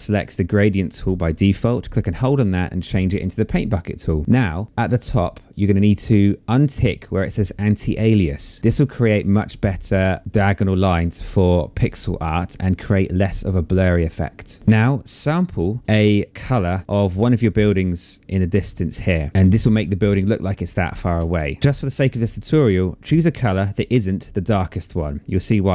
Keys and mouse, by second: 1.2 click, 3.3 click, 7.5 click.